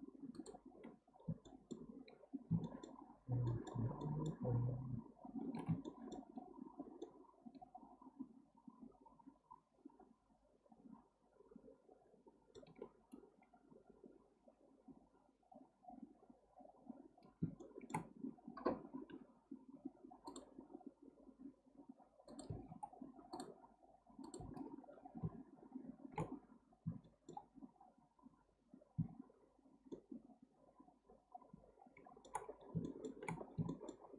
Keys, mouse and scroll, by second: 1.1-1.4 scroll down 1, 1.4-10.0 shift+middle drag, 17.6-19.1 shift+middle drag, 19.1 k, 24.8-26.4 scroll down 1, 26.4-26.7 scroll up 1, 27.0 shift+middle click, 27.9-28.4 scroll up 2, 29.9-32.5 shift+middle drag, 32.5-32.8 scroll down 1, 32.8 shift+middle click, 33.4-33.7 scroll down 1, 33.7-34.1 shift+middle drag.